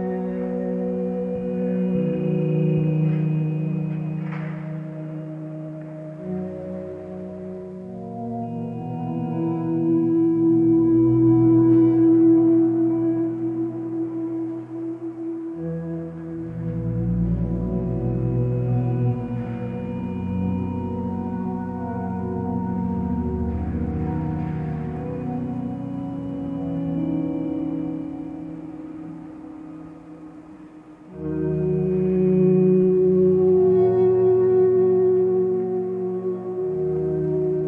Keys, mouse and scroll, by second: 1.8 ctrl+space, 4.1 x, 6.6 ctrl+z, 16.0 ctrl+z, 16.6 x, 22.2 ctrl+space, 23.5 click, 36.6 ctrl+z, 37.0 x.